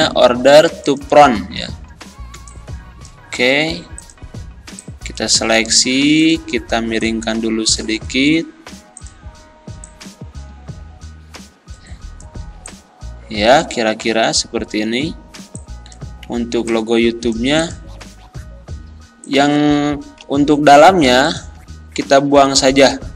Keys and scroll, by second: 2.3 z, 20.2 Delete.